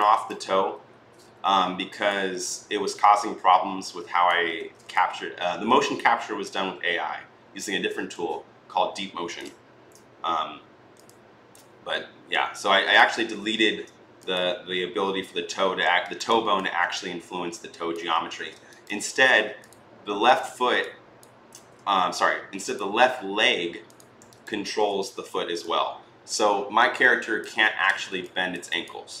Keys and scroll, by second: 1.0 r, 4.4 ctrl+z, 13.0 ctrl+z, 21.3 ctrl+z, 27.4 ctrl+z.